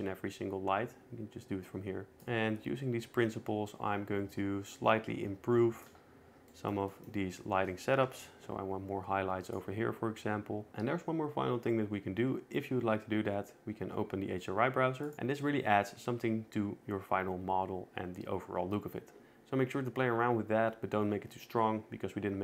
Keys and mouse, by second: 2.3 shift+Tab, 3.0 shift+middle click, 8.9 KP_0, 10.4 shift+click.